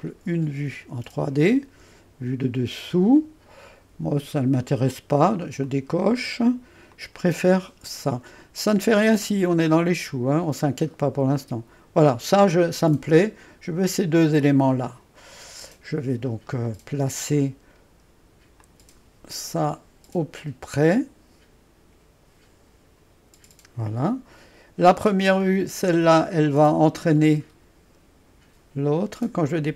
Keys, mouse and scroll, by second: 0.0 click, 0.8-1.7 scroll down 2, 1.7-2.7 scroll down 1, 5.6 click, 6.9 click, 8.6-10.7 middle drag, 14.4 click, 15.7-16.5 scroll down 1, 16.5-18.6 middle drag, 18.6-23.8 drag, 25.4 click, 29.5-29.7 drag.